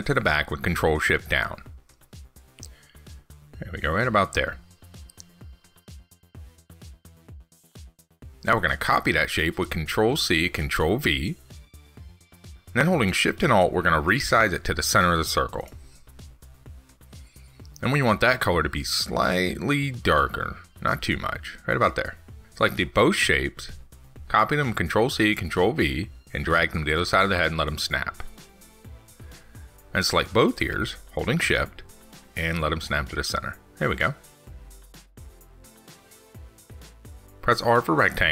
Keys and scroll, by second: 0.3 ctrl+shift+Down, 9.2 ctrl+c, 9.4 ctrl+v, 23.5 ctrl+c, 23.8 ctrl+v.